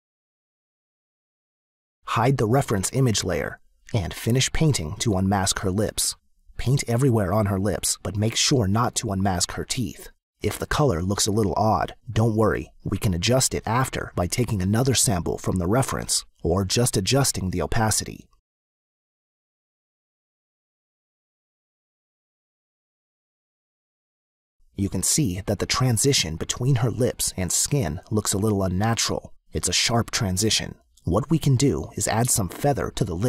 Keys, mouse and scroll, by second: 0.7 click, 3.4 click, 4.0 space, 4.1 click, 4.3 click, 6.6 click, 11.5 click, 14.1 click, 16.6 click, 20.5 click, 22.0 click, 23.7 click, 28.9 space, 29.3 click.